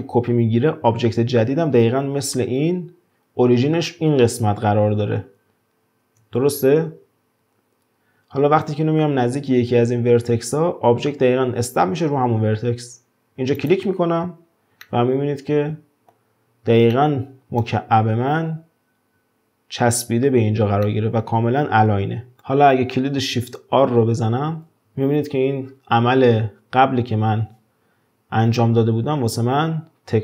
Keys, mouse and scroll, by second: 6.5 shift+d, 14.8-19.9 middle drag, 20.9-22.4 middle drag, 22.4 shift+d, 24.5 shift+r, 24.8 shift+r, 29.5 shift+r.